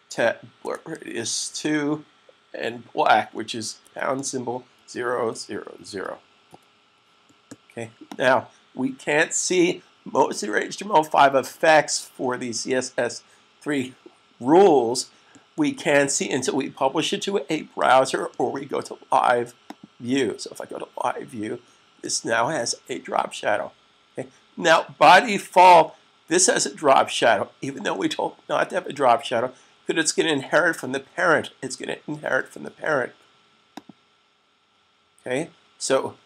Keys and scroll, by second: 0.0-0.3 typing, 3.6-5.6 typing, 8.9 s.